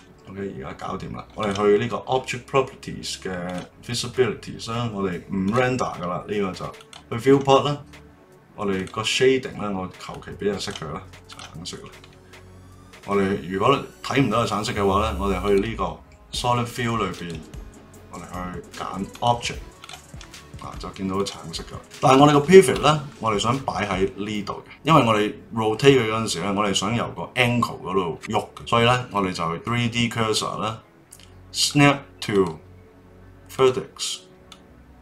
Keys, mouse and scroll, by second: 1.4 click, 3.5 click, 5.4 click, 6.7 click, 8.7 click, 11.3 click, 15.4 click, 17.1-19.8 drag, 20.2-21.1 middle drag, 21.1 click, 21.5 middle drag, 21.8-22.3 scroll up 1, 22.3-24.8 shift+middle drag, 29.5 click, 31.6 click, 32.3-34.5 drag.